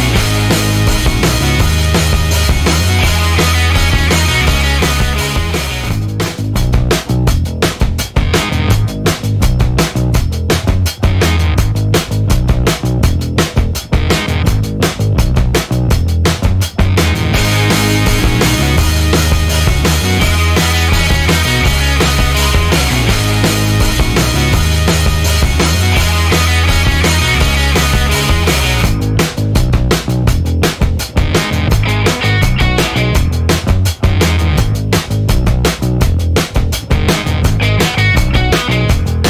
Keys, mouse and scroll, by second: 0.2 space, 1.2 click, 1.8 space, 3.3 scroll down 1, 3.9-4.9 scroll up 3, 6.1-6.6 scroll down 2, 7.2-9.2 drag, 9.4-11.1 drag, 11.3 scroll up 1, 12.2-12.5 scroll down 1, 12.7-13.1 scroll up 1, 14.1 click, 15.5-15.9 ctrl+scroll down 2, 16.8-17.2 ctrl+scroll up 2, 17.8 ctrl+click, 21.6 click, 22.5 click, 24.0 click, 27.6 click, 29.7 ctrl+click, 30.6 ctrl+click, 31.9 ctrl+click, 32.9 ctrl+click, 35.1 click, 36.8-37.1 scroll down 2, 38.1-39.2 drag.